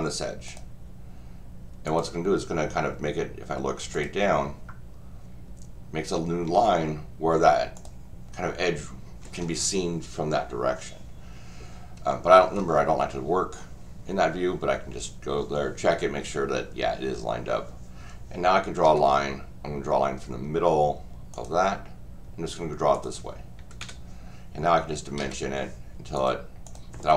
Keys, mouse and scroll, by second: 0.5 click, 1.9 click, 3.9 click, 7.7 click, 12.1 middle click, 21.3 click, 22.9 click, 23.8 Escape, 26.2 click, 26.6 click.